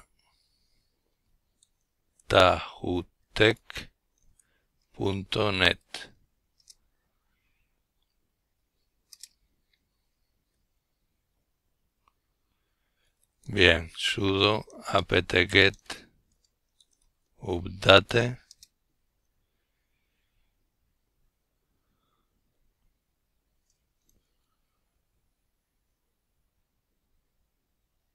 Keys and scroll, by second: 0.0-3.6 typing, 5.6 typing, 5.7 Return, 9.3-15.0 typing.